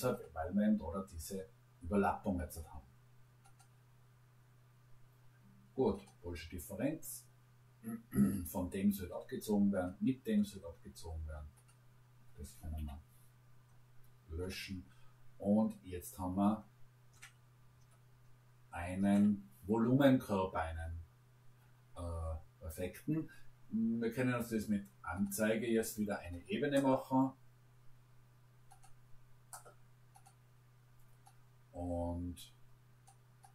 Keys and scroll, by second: 12.8 Delete.